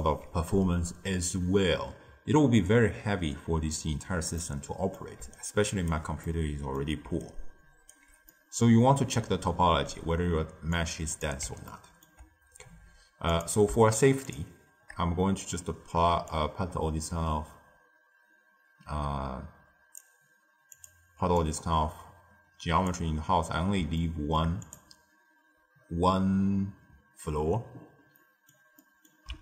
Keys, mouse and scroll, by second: 0.0 d, 2.5 d, 4.3 middle click, 5.1 d, 5.3 right click, 5.8 d, 6.2 middle click, 7.0 d, 7.2 right click, 7.9 d, 8.2-10.7 middle drag, 10.7-11.6 drag, 11.6-13.2 ctrl+middle drag, 13.2 click, 14.2 shift+click, 16.2 click, 20.7 click, 21.3 click, 23.9-24.5 shift+middle drag, 24.5 click, 28.1-29.4 middle drag.